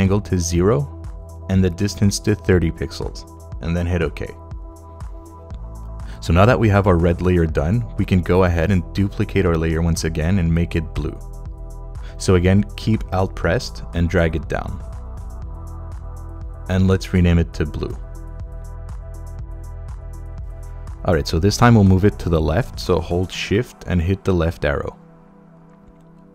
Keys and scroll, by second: 2.0-2.9 typing, 4.1 Return, 18.2-19.7 typing, 19.9 Return, 24.0 shift+Left.